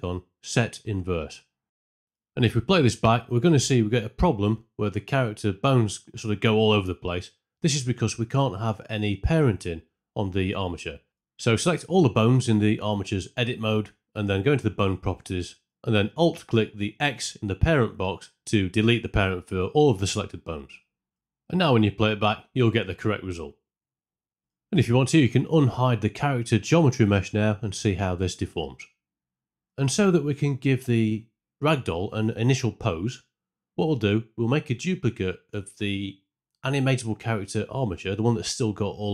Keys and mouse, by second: 0.0-2.0 typing, 0.1 click, 0.6 click, 1.2 click, 1.7 click, 3.0 space, 4.8 space, 5.1 shift+Left, 7.1 middle click, 9.6 Tab, 11.4 middle click, 12.0 a, 13.6 click, 14.0 middle click, 20.2 alt+click, 21.1 Tab, 21.9 space, 23.9 space, 24.2 shift+Left, 25.3 click, 25.8 space, 27.2 middle drag, 29.6 Tab, 34.0 click, 37.4 shift+d, 38.9 right click.